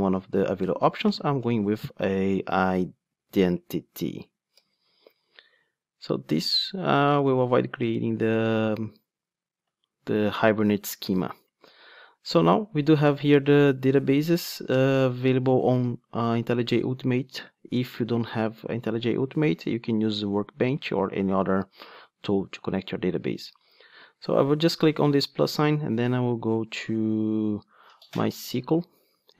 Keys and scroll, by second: 1.4 Return, 3.2 super+z, 3.8 ctrl+space, 8.5 Return.